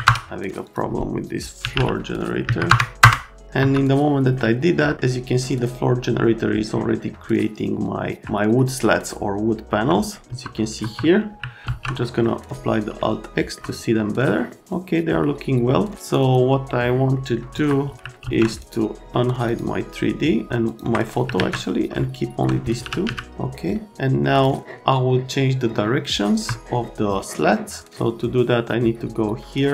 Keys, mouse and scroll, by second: 1.4-2.2 typing, 2.4 Down, 3.0 Return, 3.6 F3, 9.7 F3, 10.3 F3, 10.8 F3, 11.6 alt+z, 12.0 right click, 13.0 alt+right click, 14.2 right click, 16.0 click, 16.2 click, 17.1 right click, 17.5 F3, 17.9 F3, 18.6 right click, 19.4 click, 20.6 ctrl+click, 21.3 alt+q, 22.0 alt+right click, 22.5-23.5 typing, 26.5 F3, 28.2 click.